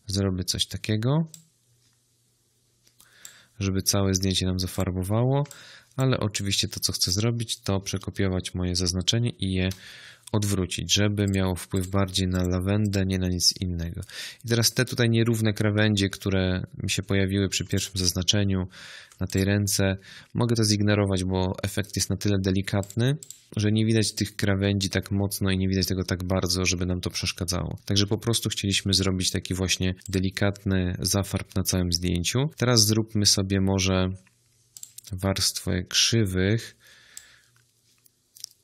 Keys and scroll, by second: 9.5 ctrl+i.